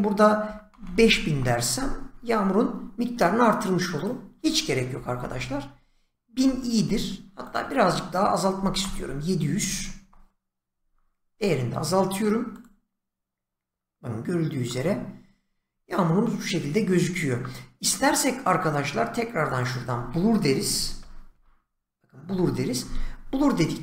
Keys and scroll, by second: 0.2-1.5 typing, 4.7-6.2 typing, 6.3 Return, 8.3-10.1 typing, 20.3-21.8 typing, 22.3 Return.